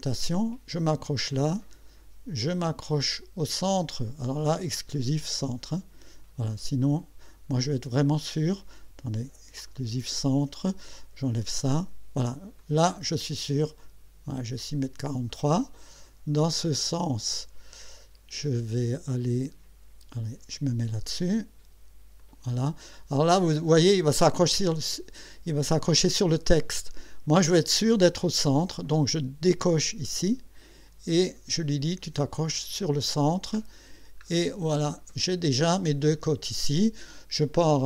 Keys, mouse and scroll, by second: 0.7 click, 5.7 click, 9.7 click, 11.2 click, 12.6 click, 15.0 click, 20.5 click, 22.2 click, 25.5 scroll up 1, 30.0 click, 32.8 click, 33.6-34.2 scroll down 4, 34.8 click.